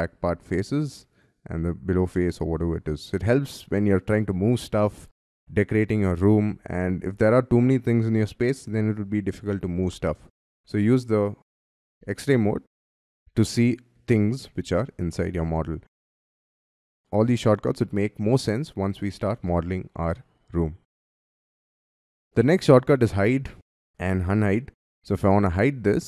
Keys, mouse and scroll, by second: 1.5 middle click, 2.3-2.8 scroll down 9, 3.1-6.2 scroll up 5, 11.6 y, 11.9 y, 12.9 y, 13.1-15.3 scroll up 11, 15.3 scroll down 5, 20.5 Escape, 21.1-21.9 scroll up 4, 21.9 scroll down 4, 22.4 middle click, 23.4 scroll down 1, 23.7 y, 23.8 scroll up 4, 24.0 middle click.